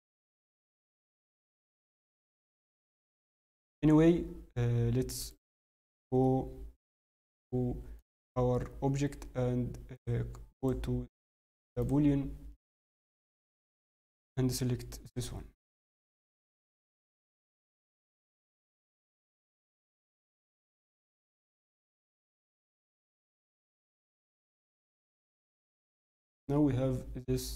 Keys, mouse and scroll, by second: 0.4 scroll up 5, 0.4 g, 2.7 middle click, 3.1 scroll, 3.2 Tab, 5.2 right click, 5.2-5.6 scroll up 2, 6.2 middle click, 7.9 click, 9.9 click, 13.1 click, 14.0-15.5 click, 15.5 scroll, 15.6 scroll down 4, 15.8 middle click, 17.6 click, 20.1 click, 20.1 middle click, 21.2 scroll, 21.9 click, 21.9 scroll up 5, 22.9 h, 23.2 middle click, 23.8 click, 25.9 middle click, 25.9 click.